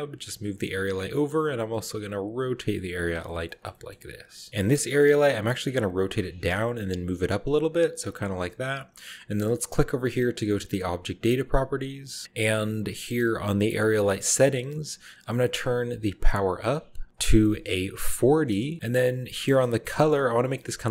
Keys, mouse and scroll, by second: 0.9 click, 1.5 r, 3.0-3.5 shift+drag, 3.2 shift+middle drag, 3.5 shift+middle drag, 3.6-4.3 shift+scroll up 1, 3.6 shift+click, 3.7 shift+middle click, 4.1 g, 4.3 click, 4.5-5.0 middle drag, 4.5-4.8 scroll down 1, 5.8-8.1 typing, 6.3 click, 6.9 click, 7.4-9.2 drag, 10.2 click, 11.1 click, 17.1 click, 18.1 typing, 18.5 Return, 19.3-20.8 middle drag, 19.5-20.8 scroll up 1.